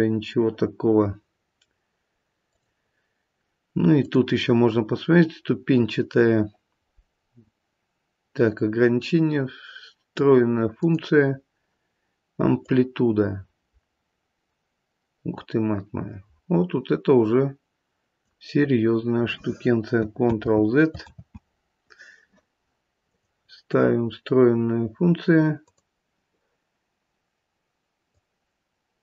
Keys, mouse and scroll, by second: 2.4 click, 3.9 click, 12.6 click, 20.3 ctrl+z, 21.0 ctrl+z, 23.0 click, 28.1 click.